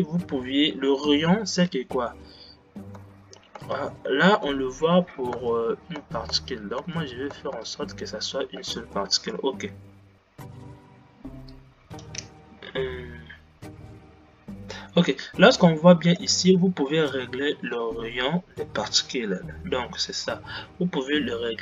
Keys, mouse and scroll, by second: 4.0 space, 4.9 shift+Left, 5.4-7.9 typing, 9.6-21.6 middle drag.